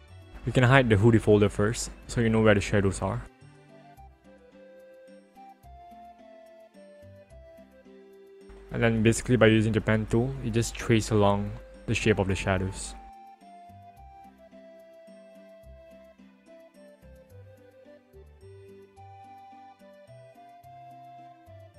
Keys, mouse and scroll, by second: 2.0 click, 5.0-6.2 ctrl+alt+scroll up 1, 6.2-7.5 ctrl+alt+scroll up 1, 8.1 click, 9.5 click, 11.2 alt+click, 11.9 click, 13.1 ctrl+alt+z, 14.7 alt+click, 17.6 alt+click, 20.1 alt+click.